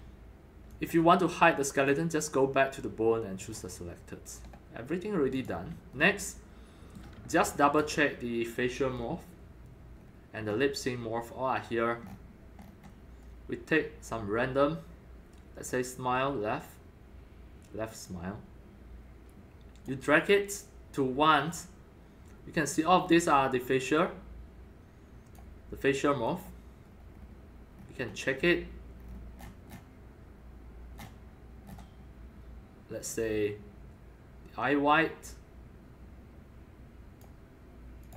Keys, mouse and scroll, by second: 0.7 click, 1.8 click, 3.4 click, 4.1 scroll up 1, 4.8 scroll down 1, 5.3-7.0 drag, 5.9-7.8 alt+middle drag, 7.3 alt+click, 7.8-9.3 alt+drag, 10.0-10.7 scroll down 4, 10.9 scroll up 4, 12.1 scroll up 3, 12.4 scroll, 12.6 scroll up 5, 14.1 scroll, 16.3 scroll down 10, 18.1-21.2 drag, 21.3 click, 21.4 click, 22.9-26.9 drag, 26.9 scroll up 1, 27.0-29.0 scroll down 12, 29.0-29.8 scroll down 19, 31.0-33.1 scroll down 13, 31.0-35.0 middle drag, 33.1-35.0 scroll down 1, 35.0 scroll, 35.3-37.2 drag, 38.0 click.